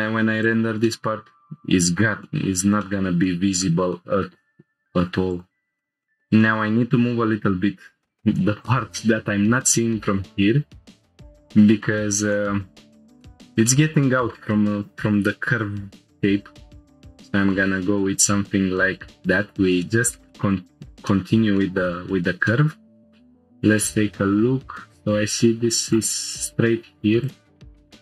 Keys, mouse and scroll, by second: 0.4 click, 0.8-2.0 middle drag, 2.2 shift+middle click, 2.8 middle click, 3.2 shift+middle click, 3.9 middle click, 5.3 ctrl+click, 5.8 shift+middle click, 6.0 shift+middle click, 6.4 middle click, 8.6 click, 12.4 middle click, 12.9 shift+middle click, 13.2 shift+middle click, 13.7 middle click, 16.4 g, 16.7 y, 19.2-19.5 drag, 19.5-19.9 scroll down 2, 19.8 middle click, 20.3 shift+middle click, 20.6 scroll down 1, 21.1 middle click, 21.6 shift+middle click, 22.1 scroll up 1, 22.5 shift+middle click, 25.9 shift+middle click, 25.9 scroll up 1, 27.2 click, 27.7-28.0 scroll up 2.